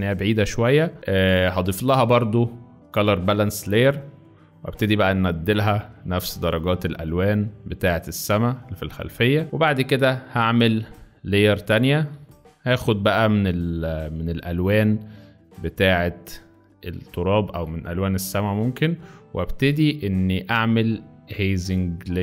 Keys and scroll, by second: 12.6 alt+b, 19.6 ctrl+z.